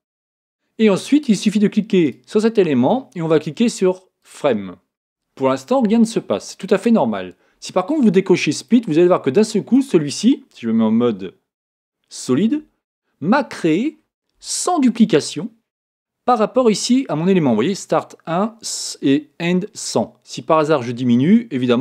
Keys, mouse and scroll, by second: 2.1-4.0 right drag, 4.2 click, 8.5 click, 9.4-11.2 middle drag, 11.2 z, 11.8-13.7 middle drag, 20.5 click.